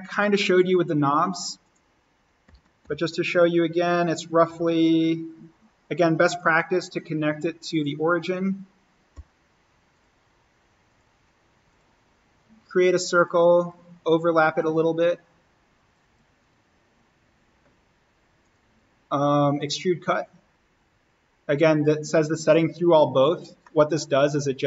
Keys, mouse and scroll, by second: 0.1 click, 2.4 alt+s, 2.8 alt+n, 3.4 scroll down 1, 4.4 l, 6.2 click, 8.0 Escape, 9.1 o, 9.9 click, 11.0 Escape, 11.6-16.4 drag, 16.8-18.4 scroll up 1, 18.4 click, 20.2-20.6 scroll down 1, 21.8 click, 23.5 scroll down 1, 23.6-24.6 middle drag.